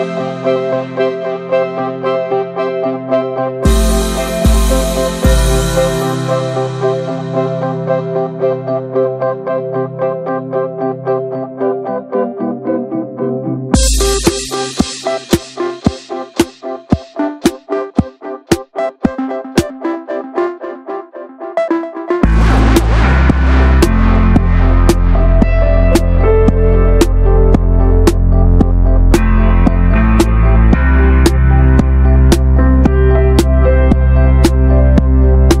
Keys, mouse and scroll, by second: 1.0 alt+middle click, 1.2 alt+z, 1.4-2.0 drag, 2.0 scroll up 1, 2.1 1, 2.5 shift+middle click, 2.8 click, 3.3 alt+z, 3.5-4.6 drag, 4.6 ctrl+z, 5.2-6.7 drag, 6.7 alt+z, 7.0 click, 7.4 shift+middle click, 7.5-7.8 scroll up 1, 7.8 click, 9.0 s, 9.8-11.8 drag, 11.8 scroll up 1, 12.0-12.4 shift+middle drag, 12.4-13.8 drag, 13.8 shift+middle click, 13.9 3, 14.1-15.4 middle drag, 15.4 shift+scroll up 1, 15.6 shift+middle click, 15.9 e, 18.0 middle click, 18.2 shift+click, 18.9 alt+z, 19.2-20.0 drag, 20.0 alt+middle click, 20.8-21.8 drag, 21.9 alt+z, 22.1 middle click, 22.6-23.1 scroll up 1, 23.1 click, 23.6 alt+z, 23.8 shift+middle click, 23.8-24.4 scroll up 2, 24.4 ctrl+r, 24.8 alt+middle click, 25.1 alt+z, 25.3 click, 25.6-26.0 middle drag, 26.6 click, 27.5 r, 28.5 click, 28.9 ctrl+z, 29.6 click, 31.0 ctrl+b, 33.7 click, 33.8 scroll down 2, 33.9-34.3 middle drag, 34.3 Tab, 34.7 alt+z, 34.8-35.6 scroll up 3, 35.0 shift+middle click, 35.1 alt+z.